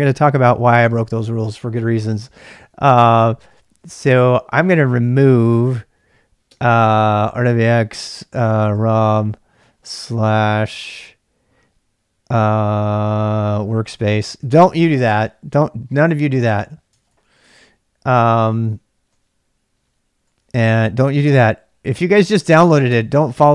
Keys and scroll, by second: 3.4-4.2 typing, 6.6-9.6 typing, 13.4-15.6 typing, 16.7-23.5 typing, 22.9 Return.